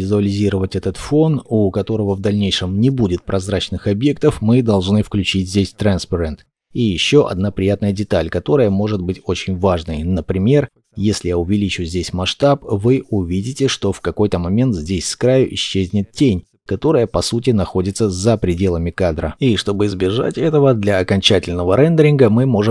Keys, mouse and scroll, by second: 10.4-11.6 scroll up 1, 11.6 shift+middle click, 15.0 shift+middle click.